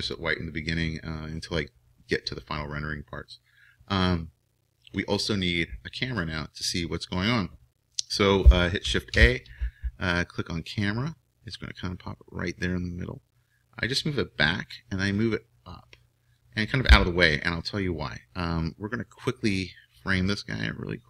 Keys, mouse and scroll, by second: 0.0-1.8 drag, 6.0-9.1 middle drag, 9.1 shift+a, 10.8 shift+a, 13.4-17.0 drag, 18.1-21.0 middle drag.